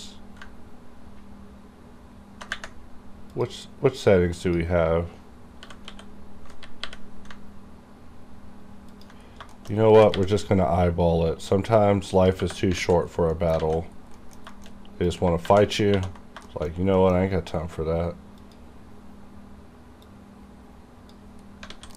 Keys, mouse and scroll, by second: 2.1 g, 3.3 click, 5.7 g, 5.9 x, 6.8 y, 8.9 ctrl+click, 9.3-9.8 scroll up 3, 9.6 shift+middle click, 10.0 g, 10.2 y, 12.2 click, 12.7 alt+z, 13.0-13.4 alt+scroll down 1, 13.4 middle click, 13.6 alt+a, 13.9 scroll down 2, 14.2 shift+middle click, 14.8-15.1 shift+scroll up 2, 15.1 click, 15.4 ctrl+1, 16.4 ctrl+2, 16.5 shift+middle click, 17.0 middle click, 18.4-21.5 drag, 21.5 scroll up 1, 21.7 alt+a.